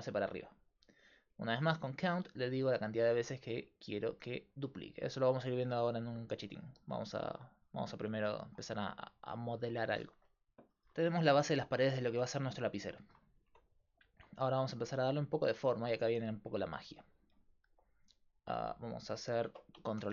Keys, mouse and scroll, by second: 1.0-3.9 middle drag, 1.3-9.2 drag, 8.1-9.3 middle drag, 13.5 Tab, 17.0-20.0 middle drag, 20.0 ctrl+r.